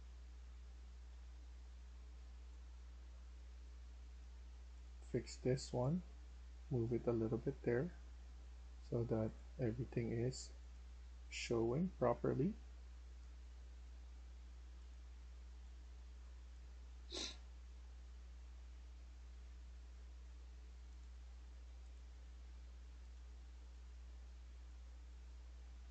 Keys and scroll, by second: 0.9 e, 25.0-25.9 typing.